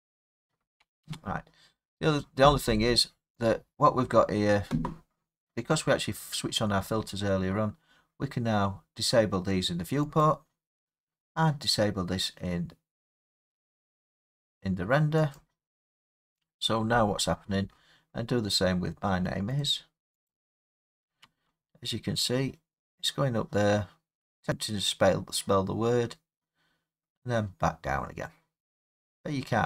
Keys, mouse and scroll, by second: 1.0 space, 3.4-8.5 drag, 10.2-15.3 drag, 15.4-19.6 drag, 20.2 click, 21.3 space.